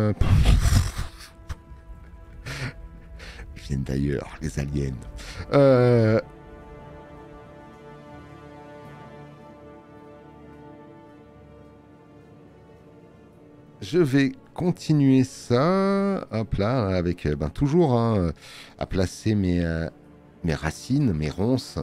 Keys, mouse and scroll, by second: 18.6 alt+middle click.